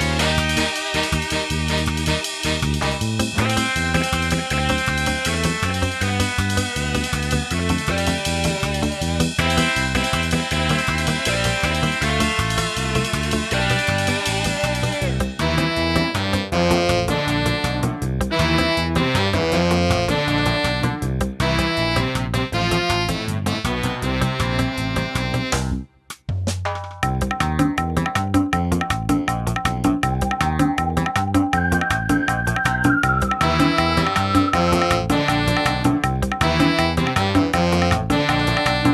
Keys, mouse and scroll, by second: 0.0 g, 0.8 g, 2.8 click, 4.3 g, 8.7 middle click, 10.4 n, 13.2 click, 14.8 click, 15.7 9, 16.1 9, 20.4 n.